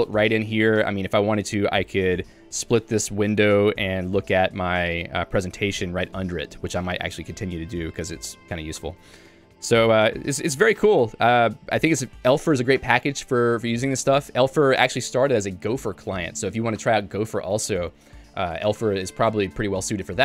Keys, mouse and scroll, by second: 4.0 click, 5.6 Return, 7.9 click, 9.1 click, 9.8 j.